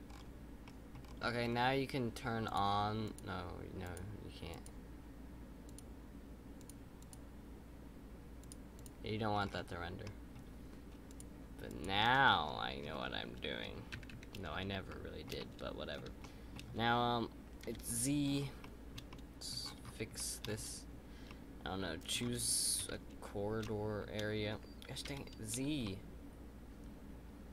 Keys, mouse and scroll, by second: 0.0-0.6 scroll down 3, 0.6-1.0 middle drag, 1.0-2.4 scroll down 5, 2.4 click, 3.0 click, 3.8 click, 4.5 click, 5.6 click, 6.5 click, 7.0 click, 8.4 click, 8.7 click, 9.3-10.0 scroll up 5, 10.0-11.0 middle drag, 11.0-11.8 drag, 12.3 middle click, 12.9-13.9 scroll up 2, 14.8-17.6 shift+middle drag, 17.6 KP_7, 18.2-18.6 scroll down 6, 18.6-19.6 shift+middle drag, 19.6-20.1 scroll up 6, 20.1 shift+middle click, 20.4-21.2 scroll up 3, 21.2 scroll up 1, 21.2-22.8 middle drag, 22.8 KP_1, 23.6-25.0 middle drag, 25.0 KP_7, 25.8-27.5 shift+middle drag.